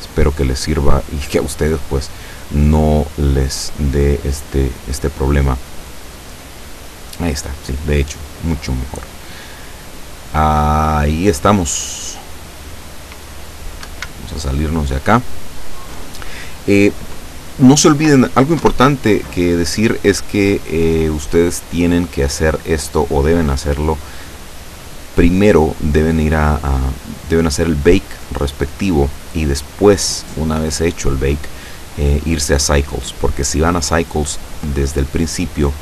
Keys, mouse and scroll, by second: 13.9 Escape, 14.4-14.7 scroll down 2, 14.7-15.9 middle drag, 16.0 middle click, 16.1-16.9 scroll down 1, 17.7-18.6 scroll down 1, 18.7 0, 20.6 middle click, 21.2 scroll down 2, 21.7 scroll down 1, 25.1 click, 26.4-26.9 scroll down 1, 26.9 scroll up 1, 27.1 scroll down 1, 27.7-28.3 scroll down 1, 28.3-28.6 scroll down 1, 28.8-29.2 scroll down 1, 29.7-30.1 scroll down 2, 33.7-34.6 scroll down 3.